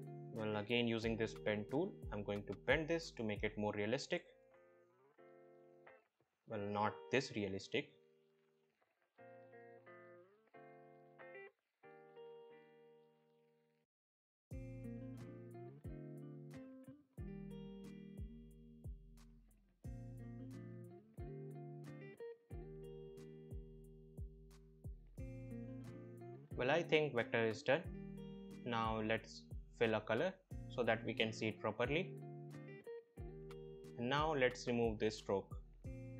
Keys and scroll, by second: 3.1 ctrl+z.